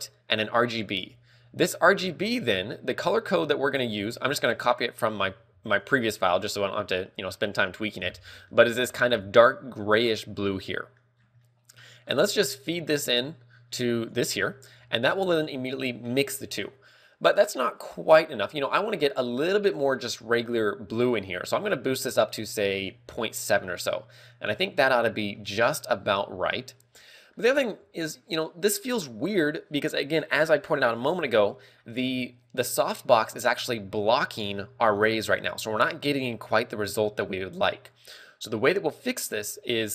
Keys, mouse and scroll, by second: 1.1 g, 8.8 middle click, 9.1 scroll up 2, 10.2 scroll up 5, 10.9 middle click, 11.4-12.5 scroll down 4, 11.6 middle click, 13.4 click, 23.7-24.2 scroll down 3, 24.1 middle click, 26.6-27.1 scroll up 3, 27.2 middle click, 27.2 scroll up 1.